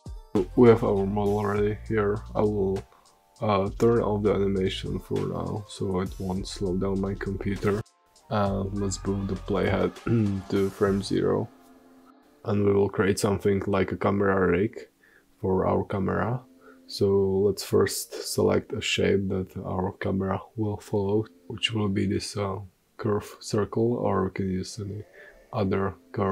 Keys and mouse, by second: 7.9-11.3 middle drag, 11.3-12.5 drag, 14.7-15.1 middle drag, 16.5 shift+a, 23.5-24.2 drag, 24.2 s.